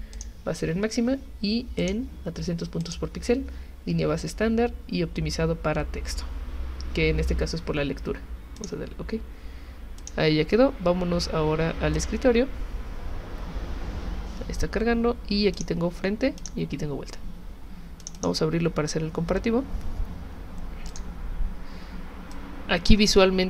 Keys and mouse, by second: 0.1 click, 1.8 click, 2.8 click, 8.6 click, 10.0 click, 11.9 click, 15.5 click, 16.4 click, 18.0 click, 18.2 click, 20.9 click, 22.3 click.